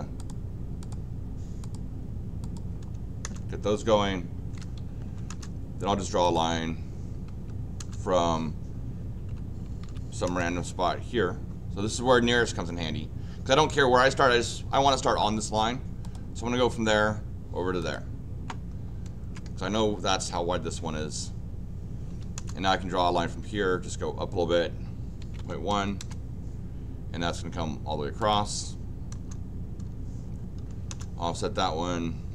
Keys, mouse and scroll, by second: 0.2 click, 0.8 click, 1.6 click, 2.4 click, 3.2 Return, 5.0 l, 5.3 Return, 6.2 click, 7.3 Escape, 7.8 Return, 9.0-10.3 typing, 16.0 click, 17.8 click, 22.1 l, 22.3 Return, 28.2 click, 29.1 Return, 30.6 o, 30.9 Return.